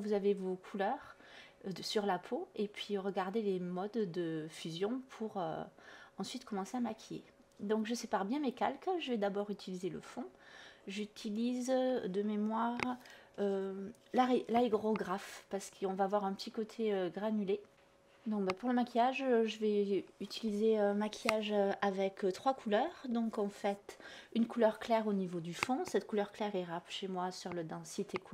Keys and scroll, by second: 2.0 b, 20.8 ctrl+z, 22.0 ctrl+z, 22.4 ctrl+z, 23.7 ctrl+z, 24.2 ctrl+z, 25.4 ctrl+z.